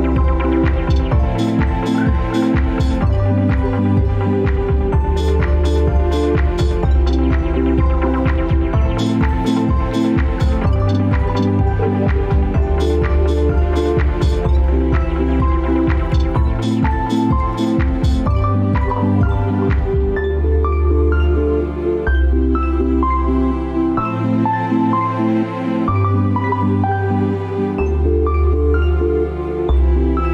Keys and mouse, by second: 5.4-10.1 middle drag, 11.3 ctrl+s, 12.6 click, 13.2 click, 16.2-20.3 drag, 25.0-30.3 middle drag.